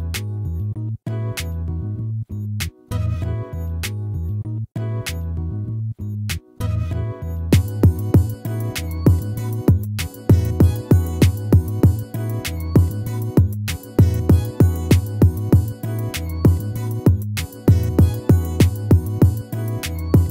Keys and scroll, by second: 0.9 ctrl+-, 2.6 ctrl++, 6.7 ctrl+-, 9.0 ctrl++, 11.5 ctrl+z, 12.9 ctrl+z, 14.6 ctrl+-, 17.1 ctrl++.